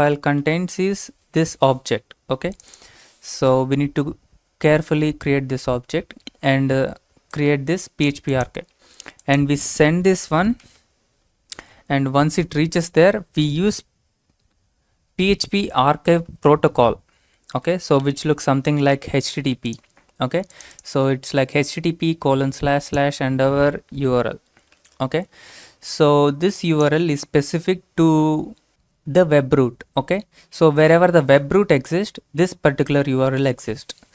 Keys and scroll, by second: 0.0-0.4 typing, 10.0 typing, 12.4 typing, 15.2 typing, 24.5 typing.